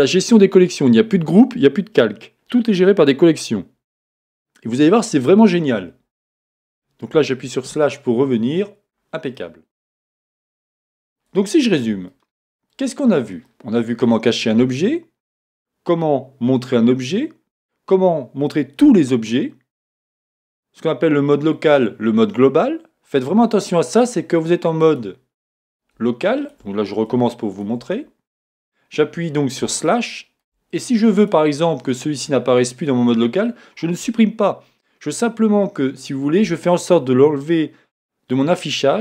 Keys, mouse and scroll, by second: 7.7 KP_Divide, 8.4-8.9 scroll down 2, 9.4-11.0 middle drag, 11.0 scroll down 1, 11.1 middle click, 12.6 shift+middle click, 13.0-13.5 scroll down 1, 24.8 click, 26.4 shift+click, 27.5 shift+click, 28.5 KP_Divide, 29.9-31.2 shift+middle drag, 31.2 click, 31.9 click.